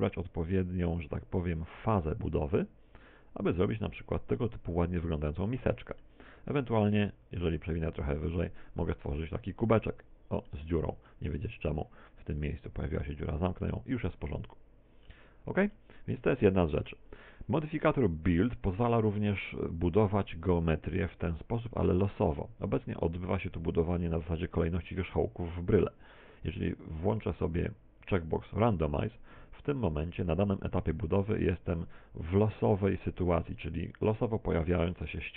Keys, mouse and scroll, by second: 0.1 click, 5.3 middle click, 9.8 middle click, 11.9 middle click, 12.3 middle click, 13.6 click, 14.6 middle click, 16.7 middle click, 29.0 click, 35.1 middle click.